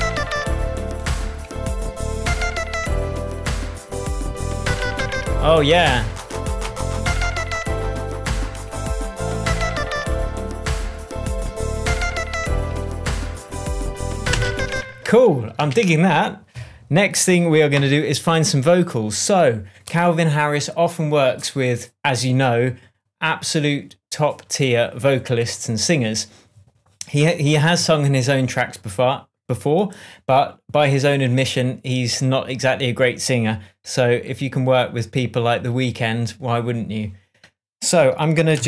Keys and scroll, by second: 5.4 super+d, 6.1 shift+super+d, 6.3 shift+super+End, 6.8 shift+super+End, 7.0 shift+super+s, 7.5 super+s, 14.7 space, 15.4 super+space, 16.1 super+s.